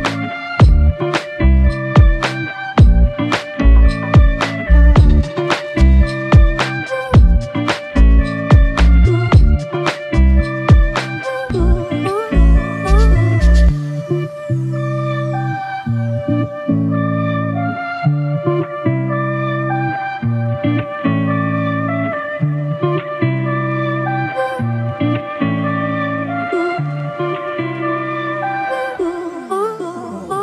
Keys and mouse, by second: 0.0-0.3 typing, 6.7 ctrl+z, 8.1-8.7 typing, 10.6 ctrl+i, 18.0 f, 19.5 ctrl+alt+click, 28.9 double click.